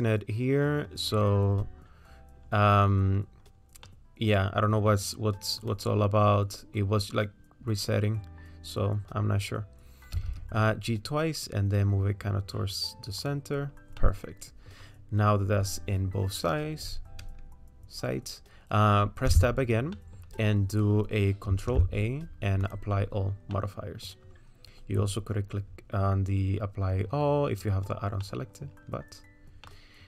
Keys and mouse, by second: 3.9 middle click, 5.6 click, 10.2 g, 14.1 click, 14.1 right click, 19.5 Tab, 20.0 click, 20.0 right click, 22.1 ctrl+a, 23.7 click, 28.3 middle click, 29.7 middle click.